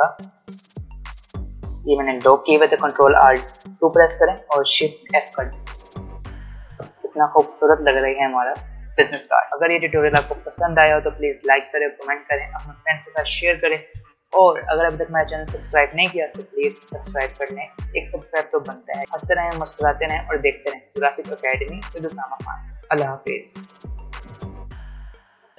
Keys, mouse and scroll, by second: 3.7 ctrl+alt+2, 4.9 shift+f.